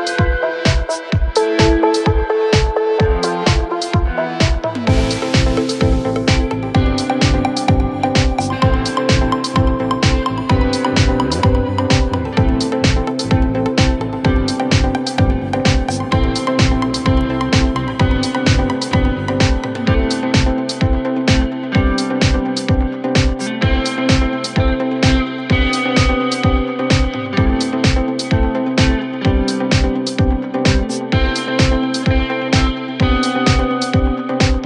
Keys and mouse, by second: 0.2-6.3 drag, 3.2 KP_1, 3.3 KP_3, 4.4 r, 6.3-9.8 middle drag, 6.5 g, 9.8 click, 10.5-12.0 middle drag, 10.5 s, 12.0-17.8 drag, 17.2 s, 17.8-25.5 middle drag, 18.3-21.6 drag, 20.8 s, 23.3 s, 24.7-34.6 drag, 25.6 ctrl+z.